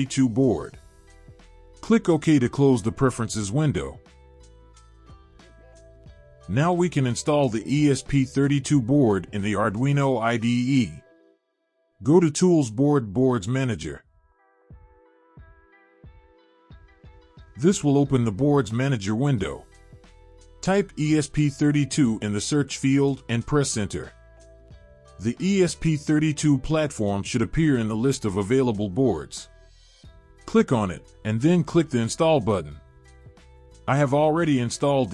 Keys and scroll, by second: 21.4-23.4 typing.